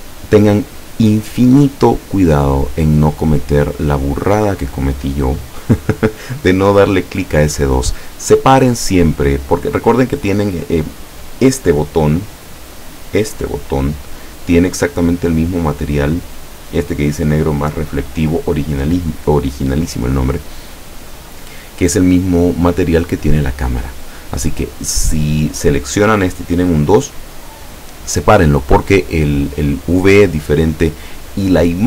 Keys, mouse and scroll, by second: 12.2-12.6 scroll down 2.